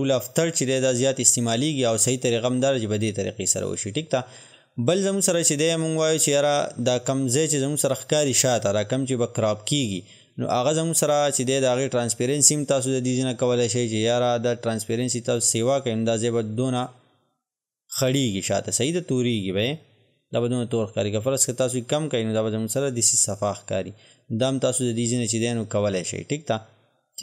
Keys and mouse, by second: 11.0 click, 14.5-23.9 drag, 23.9-27.2 drag.